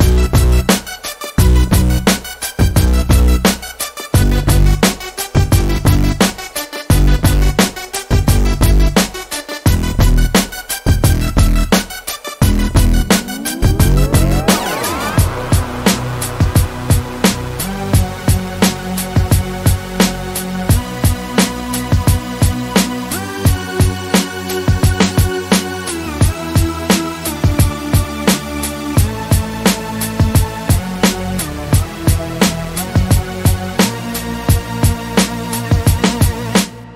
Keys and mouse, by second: 1.5 right click, 4.5 middle click, 4.9-5.6 middle drag, 6.4 KP_1, 6.9 KP_5, 9.8 KP_5, 11.6 shift+a, 15.5-16.6 drag, 16.6-18.3 middle drag, 19.4 Tab, 20.2-22.2 drag, 22.3 Tab, 22.9-23.5 drag, 25.4-33.1 drag, 34.8-35.2 middle drag.